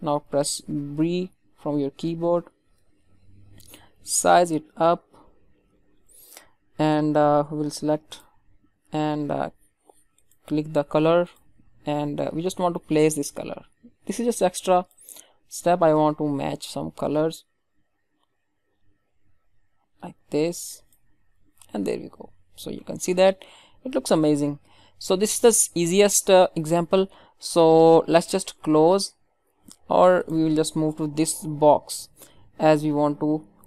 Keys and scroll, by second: 21.3 ctrl+d.